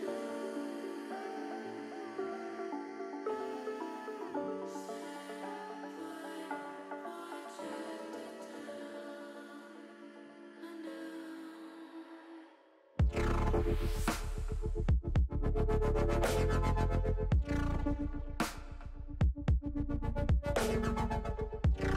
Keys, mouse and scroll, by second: 0.2 middle click, 1.9 shift+click, 2.8 middle click, 4.3 KP_7, 5.6 e, 8.1 click, 12.3 ctrl+z, 14.4 e, 15.3 y, 16.9 click, 18.9 s, 20.2 click, 20.7 ctrl+z, 21.6 click.